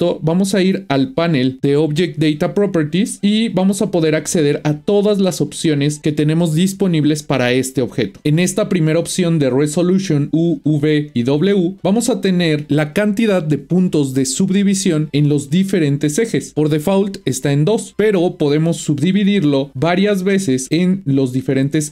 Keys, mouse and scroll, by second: 3.2 click, 19.3-21.9 drag.